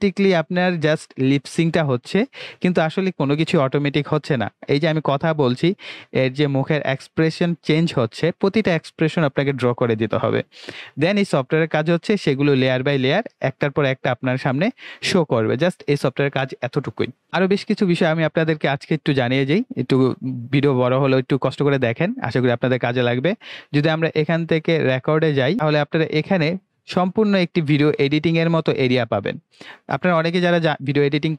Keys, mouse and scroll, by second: 24.8 click, 25.1 click.